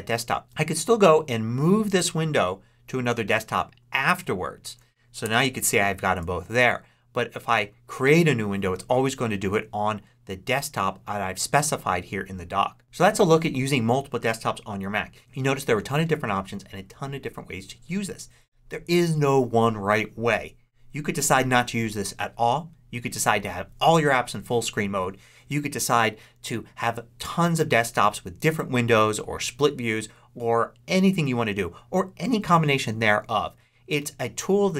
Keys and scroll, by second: 0.4 ctrl+Up, 5.1 ctrl+Left, 6.0 ctrl+Right.